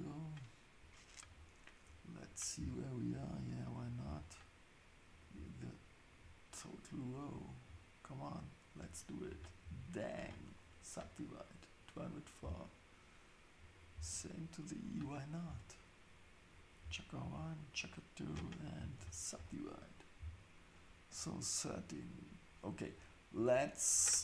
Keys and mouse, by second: 5.1 shift+click, 8.2 ctrl+click, 9.6 ctrl+shift+s, 13.7 click, 14.9 shift+click, 16.5 click, 19.0 ctrl+shift+s.